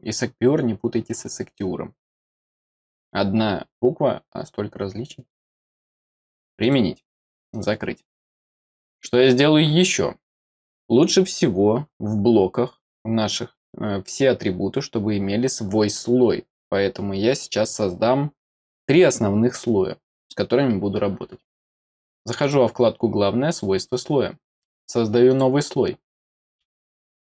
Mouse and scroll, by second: 6.5 click, 7.4 click, 8.3 middle click, 22.3 click, 23.4 click, 25.2 click.